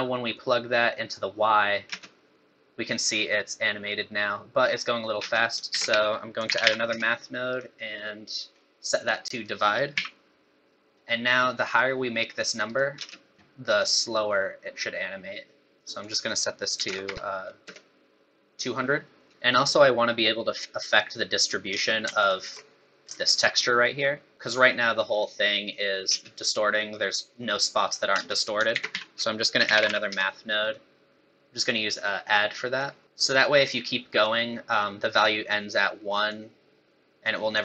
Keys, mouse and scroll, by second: 0.4 click, 2.0 space, 5.2 space, 5.7 shift+a, 8.5 scroll up 4, 9.3 click, 10.7 middle click, 11.7 click, 13.0 space, 13.9 click, 16.0 click, 17.0 KP_0, 19.3 middle click, 19.3 scroll down 6, 19.3 x, 19.3 space, 20.1 scroll up 4, 21.7 space, 22.2 ctrl+shift+click, 26.1 space, 28.2 space, 28.7 shift+a, 31.6-33.2 click, 36.3 click.